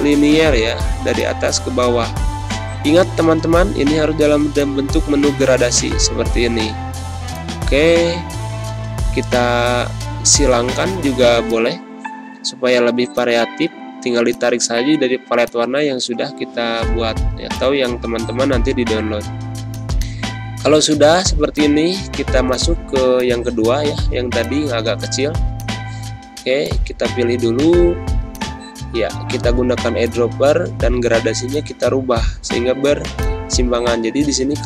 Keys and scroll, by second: 4.2 z, 4.8 space, 6.0 g, 17.1 g, 22.2 z, 23.4 space, 27.6 i, 29.2 ctrl+-, 29.8 space, 31.0 g, 32.9 z.